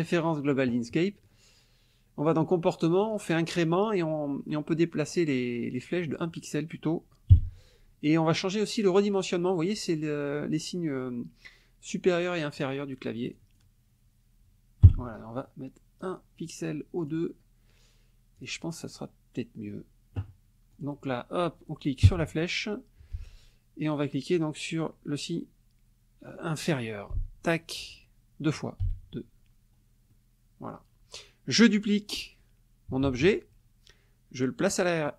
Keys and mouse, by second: 0.0 click, 2.3 click, 3.0 click, 5.9 click, 7.3 KP_1, 13.3 click, 14.8 KP_1, 16.0 click, 17.0 click, 18.4 click, 20.8 click, 22.0 Down, 27.1 <, 28.8 <, 30.1 click, 33.0 ctrl+d, 34.6 click.